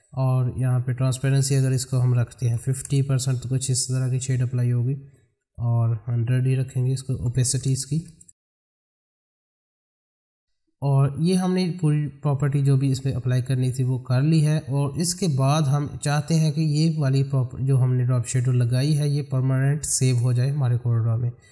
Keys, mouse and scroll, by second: 5.4 click, 15.8 middle click.